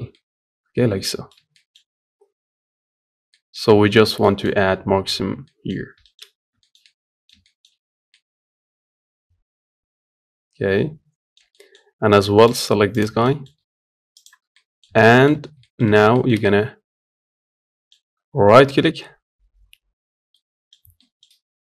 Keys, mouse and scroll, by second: 1.9 scroll up 1, 2.1 scroll down 4, 2.7-3.1 scroll up 2, 3.1-5.5 middle drag, 5.5-5.8 scroll down 1, 5.8 shift+middle click, 6.0-6.4 scroll up 1, 6.4-12.3 shift+middle drag, 12.3 shift+click, 12.7 shift+click, 13.0 middle click, 14.3-21.6 middle drag.